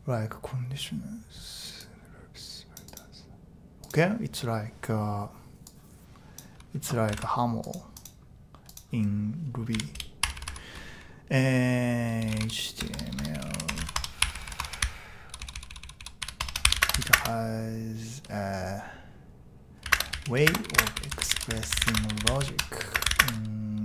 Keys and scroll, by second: 9.7 typing, 11.9-17.5 typing, 19.6-23.8 typing.